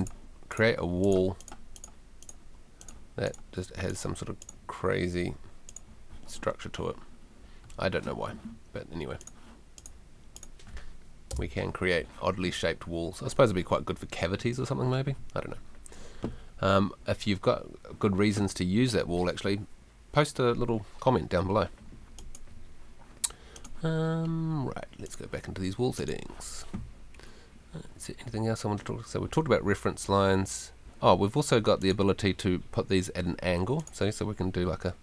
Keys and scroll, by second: 11.3 BackSpace.